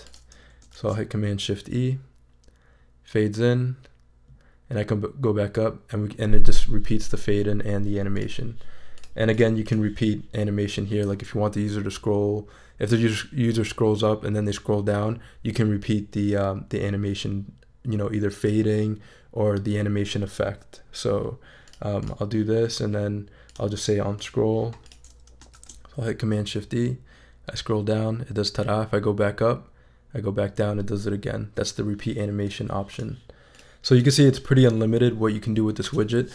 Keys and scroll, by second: 0.7 shift+super+e, 25.5 shift+super+e.